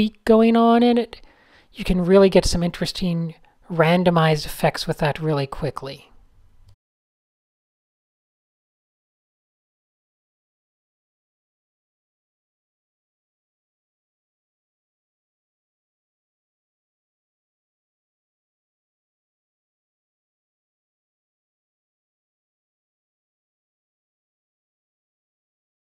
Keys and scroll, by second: 1.6 alt+shift+super+t, 2.4 alt+shift+super+t, 5.6 3, 6.2 alt+shift+super+r, 6.8 alt+shift+super+g, 6.9-13.5 typing, 11.1 alt+super+a, 14.8 alt+shift+super+r, 15.5 super+h, 15.9 alt+shift+super+r, 18.0 alt+super+r, 21.0 super+h, 22.9-24.5 typing, 24.4 shift+super+a, 25.6 n.